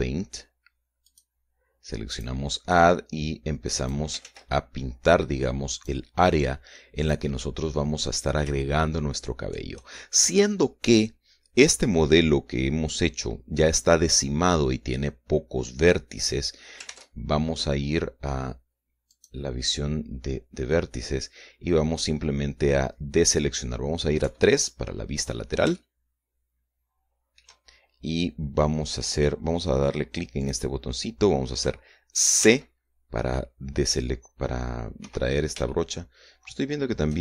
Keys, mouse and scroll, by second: 1.4 click, 2.5 click, 3.2-4.5 drag, 4.6 ctrl+z, 6.2 click, 7.4 click, 9.2 shift+middle click, 17.3 ctrl+Tab, 19.5 click, 24.6 KP_3, 26.2-28.0 shift+middle drag, 30.8 click, 32.8 c, 33.8-34.4 scroll down 1, 34.6-34.9 scroll down 2, 35.4 Escape, 36.1-37.2 shift+middle drag.